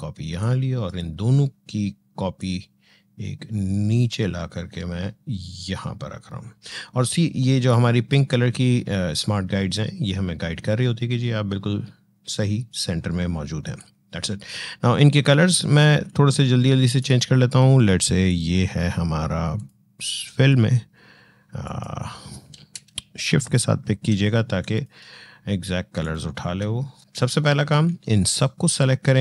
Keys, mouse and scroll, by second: 0.2-13.8 drag, 15.8-18.1 drag, 22.4 ctrl+z, 23.1 shift+click, 27.2 alt+scroll down 1, 28.1-29.2 drag.